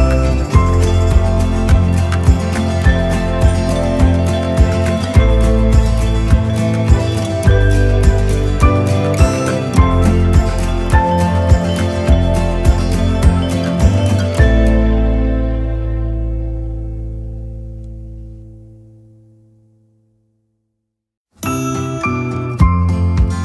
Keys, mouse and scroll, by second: 2.7 click, 3.9 click, 5.5-6.8 drag, 7.1 click, 8.3 click, 9.3-10.8 drag, 13.1 click, 14.9-16.9 drag, 17.1 click, 17.9-20.9 right drag, 21.3 right click, 22.4 click.